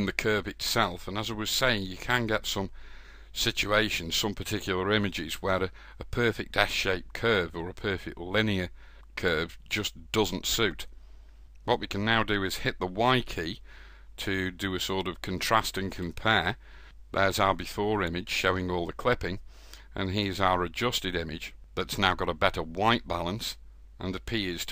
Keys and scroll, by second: 11.8 y.